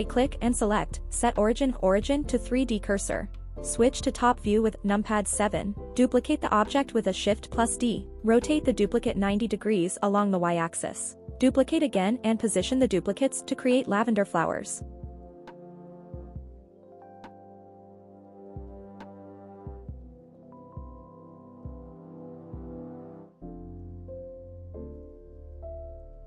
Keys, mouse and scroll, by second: 0.1 middle click, 3.9 KP_7, 5.5 shift+d, 5.8 right click, 6.5 r, 7.3 KP_9, 7.6 KP_0, 8.1 y, 9.5 Return, 10.8 KP_1, 12.3 KP_7, 14.1 shift+d, 14.5 right click, 15.2 r, 17.0 click, 17.5 shift+d, 17.8 right click, 18.0 r, 19.2 click, 20.1 shift+d, 20.4 right click, 21.4 r, 22.2 click, 23.0 click, 23.3 shift+d, 23.6 right click, 23.9 r, 25.4 click.